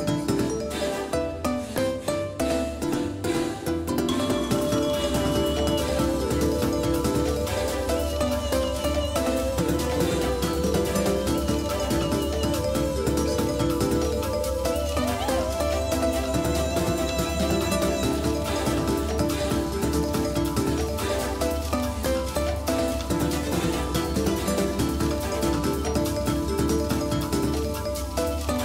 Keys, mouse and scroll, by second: 6.9 shift+a, 10.3-15.4 drag, 14.6 Tab, 16.6 w, 18.2 w, 21.5 s, 28.3-28.6 drag.